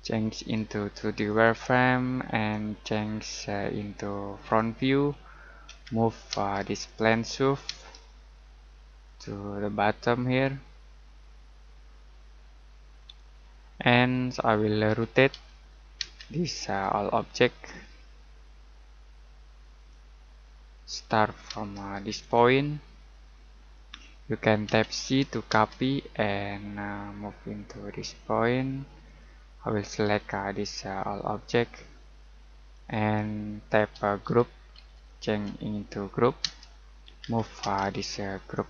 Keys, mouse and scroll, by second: 5.6 m, 6.3 space, 6.7 click, 7.6 space, 9.0 click, 10.3-12.5 scroll up 1, 13.0 click, 13.6-14.3 scroll down 1, 14.3 middle click, 14.8-16.0 typing, 16.6 click, 19.7 click, 20.4-20.7 scroll down 1, 20.7 middle click, 21.5 space, 22.2 click, 23.3 middle click, 24.6 c, 25.5 space, 29.0 click, 32.7 click, 33.9-37.6 typing, 38.5 click.